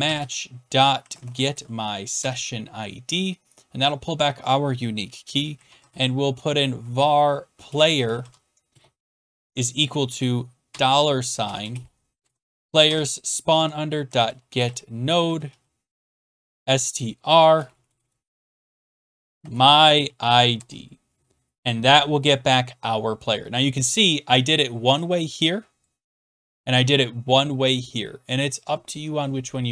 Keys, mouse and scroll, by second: 0.0-2.1 typing, 2.2 Tab, 5.2 Return, 5.3-20.5 typing, 16.1 Tab, 20.5 Tab, 22.5-23.2 typing, 25.8 click, 26.5 click, 28.5 click.